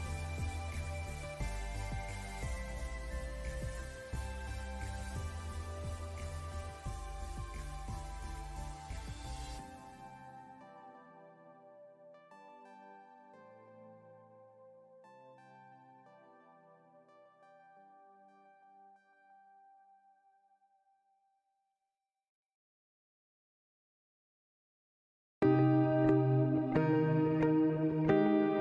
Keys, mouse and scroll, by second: 2.9 click, 3.1-6.9 drag, 7.6 alt+scroll up 1, 8.0 click, 8.1 space, 8.4-8.9 alt+scroll down 2, 10.6-15.5 drag, 16.0 click, 16.7 alt+scroll down 1, 17.6 click, 19.0 alt+scroll up 1, 19.7 alt+scroll down 1, 19.9 alt+scroll up 1, 20.6-28.6 drag.